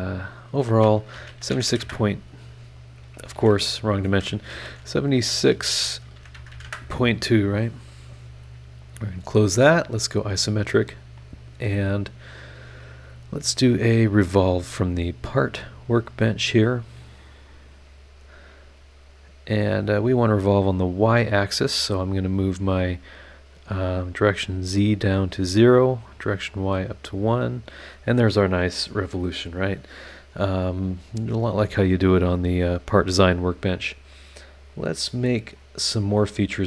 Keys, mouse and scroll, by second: 1.1 KP_7, 1.3 KP_6, 1.7 KP_2, 1.8 KP_Enter, 2.9 click, 3.3 shift+h, 3.8 shift+click, 4.5-6.5 typing, 6.6 KP_Enter, 8.4 click, 9.8 click, 14.7 click, 16.4 click, 17.7 click, 18.7 scroll down 1, 24.4 click, 25.4 click, 27.1 click, 30.3 scroll down 1, 30.7 scroll up 1, 32.8 scroll down 1, 34.7 click, 35.5 click.